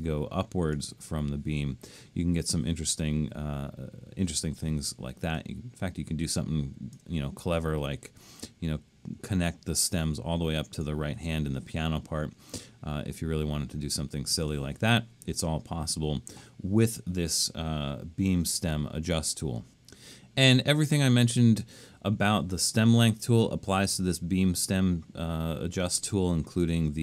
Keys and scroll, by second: 4.4 super+z, 14.3 super+z.